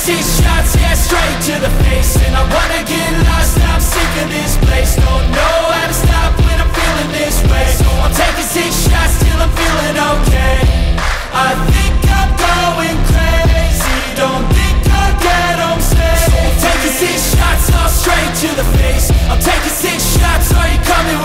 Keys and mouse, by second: 2.7 g, 9.1 g, 16.8 e.